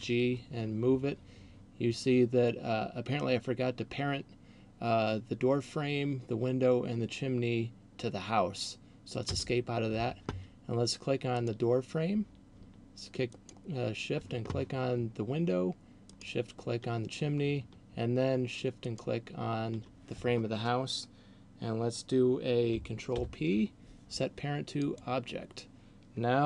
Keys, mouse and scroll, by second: 0.0 g, 11.3 right click, 13.3 shift+right click, 16.0 shift+right click, 19.0 shift+right click, 23.3 ctrl+p.